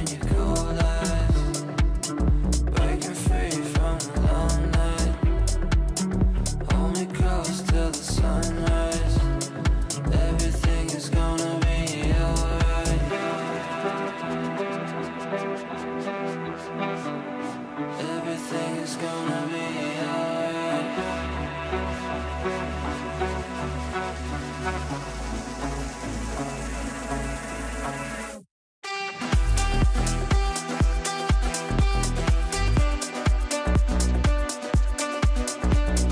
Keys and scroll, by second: 30.9 ctrl+q.